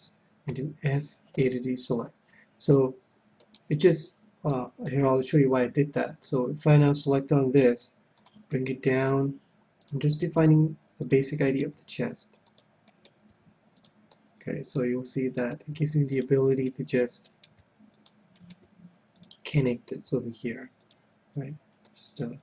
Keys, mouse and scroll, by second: 0.5 f, 1.4 a, 3.5-6.5 middle drag, 6.0 KP_1, 6.7-12.0 right drag, 7.6 g, 8.4-15.5 drag, 8.9 g, 10.6 g, 11.8 g, 13.0-14.5 right drag, 13.3 g, 14.1-15.8 middle drag, 15.3-19.0 right drag, 15.7 g, 16.2-19.0 drag, 16.3 g, 17.6 g, 18.7 g, 20.2 g, 21.3-22.4 drag, 21.3 middle click, 22.0-22.4 middle drag.